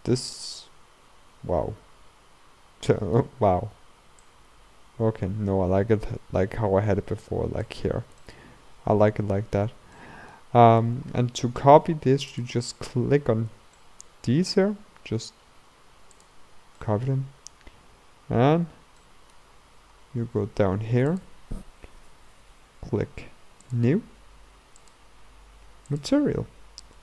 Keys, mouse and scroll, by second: 0.0-0.4 scroll up 2, 0.4-4.3 middle drag, 4.3-7.3 drag, 8.0 scroll down 2, 8.3-12.5 middle drag, 12.5 click, 13.8-16.3 middle drag, 16.3 shift+click, 16.8-23.9 middle drag, 23.9-24.9 drag, 26.1 click.